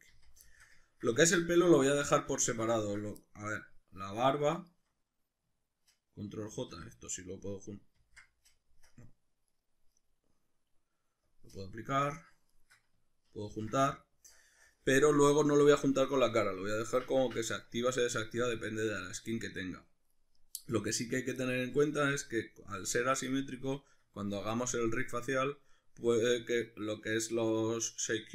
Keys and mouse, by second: 0.1 z, 1.2 Tab, 4.5 shift+right click, 6.5 ctrl+j, 8.0 ctrl+z, 8.9 right click, 9.5 right click, 11.2-12.0 drag, 12.0 right drag, 12.5 shift+right click, 13.5 ctrl+j, 13.9-20.4 middle drag, 20.4 right click, 20.7 right click, 21.4-22.7 shift+middle drag, 22.0 Tab.